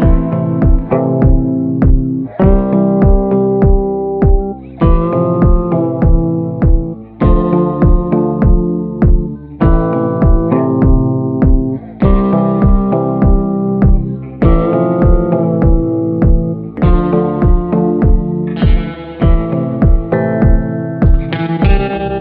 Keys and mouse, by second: 0.1 shift+middle click, 0.9 b, 1.8 b, 4.1 b, 5.2 shift+click, 6.3 click, 7.0 click, 9.6 click, 10.8 click, 11.5 ctrl+z, 11.7 click, 12.2 ctrl+z, 12.3-15.9 drag, 16.8-18.6 drag, 19.1 a, 20.2 ctrl+i, 20.8 b, 22.1 b.